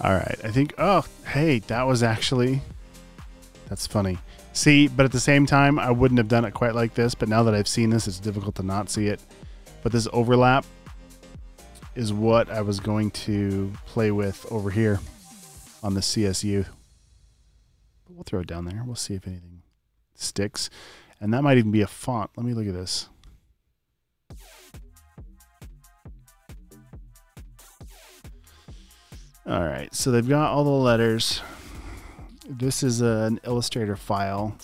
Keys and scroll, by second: 11.6 super+v, 13.7 space, 21.0-21.7 typing.